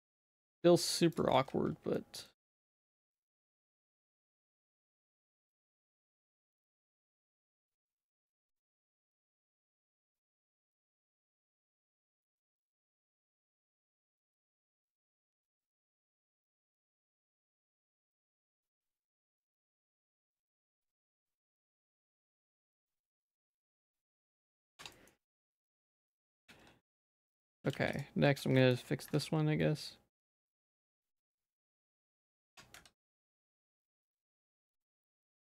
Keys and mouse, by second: 0.1 shift+middle click, 1.1 click, 1.3 z, 2.0 shift+middle click, 2.7 shift+middle click, 3.2 alt+s, 5.4 alt+s, 6.8 s, 7.7 alt+s, 11.8 r, 13.3 ctrl+t, 14.7 z, 15.0 middle click, 17.0 ctrl+t, 18.5 Tab, 18.7 Tab, 19.2 alt+s, 20.4 z, 21.4 alt+s, 22.7 Tab, 22.9 z, 23.2 middle click, 23.9 shift+click, 24.2 middle click, 24.6 ctrl+s, 24.8 Tab, 24.9 middle click, 25.6 click, 26.5 alt+s, 27.7 ctrl+z, 28.0 click, 28.3 z, 28.6 shift+middle click, 29.2 alt+s, 32.5 Tab, 32.8 z, 33.0 middle click, 33.6 ctrl+s, 33.8 middle click, 34.0 Tab, 34.2 z, 34.5 shift+middle click, 34.9 click, 35.1 z, 35.4 middle click.